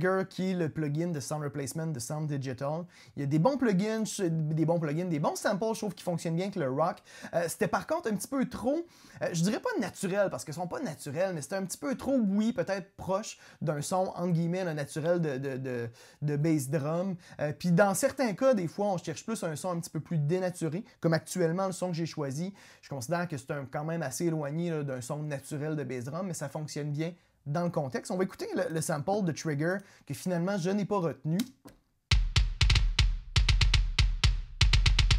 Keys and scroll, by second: 32.1 space.